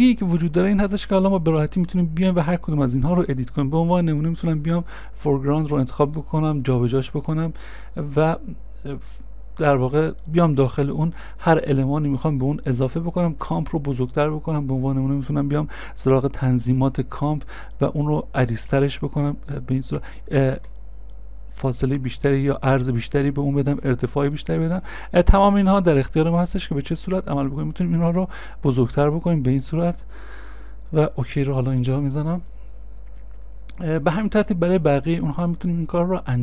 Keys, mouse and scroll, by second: 0.7 ctrl+a, 11.1 ctrl+a, 11.7 scroll down 1, 11.7 middle click, 20.1 middle click.